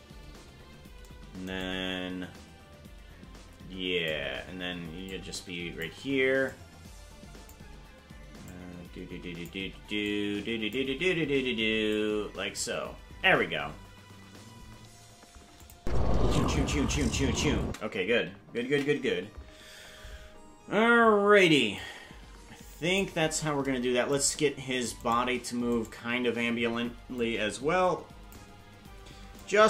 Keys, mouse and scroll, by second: 1.6-4.1 drag, 5.0 click, 6.5-7.5 drag, 8.4-9.5 drag, 10.0 click, 11.8 click, 15.6 click, 15.7 space, 17.7 space, 20.8 ctrl+s, 21.8-23.0 drag, 24.3 right click, 25.2 shift+right click, 27.2-28.3 drag, 29.3-29.6 shift+drag.